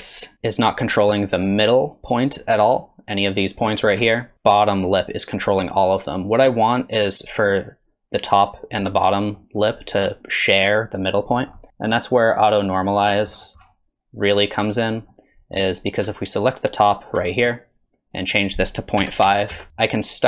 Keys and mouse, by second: 2.5 middle click, 4.2 ctrl+click, 4.3 r, 9.4 middle click, 12.5 click, 15.1 middle click, 16.7 ctrl+click, 18.2-19.7 drag, 19.7 middle click, 20.1 middle click.